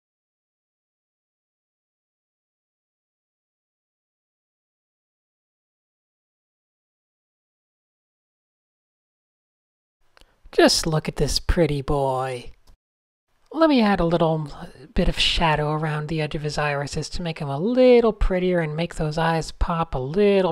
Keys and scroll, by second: 0.4 alt+shift+super+-, 1.2 Escape, 1.6 super+a, 3.3 a, 3.7 super+space, 4.8 s, 5.2 a, 5.8 super+0, 6.0 shift+super+a, 6.8 Tab, 7.5 super+0, 7.8 super+f, 8.4 super+0, 9.0 super+space, 9.8 Tab, 11.6 x, 12.7 shift+9, 13.0 super+z, 13.4 shift+9, 15.0 fn+=, 15.4 alt+shift+super++, 16.1 alt+super+o, 16.3-17.3 typing, 18.0 super+0, 18.3 Tab.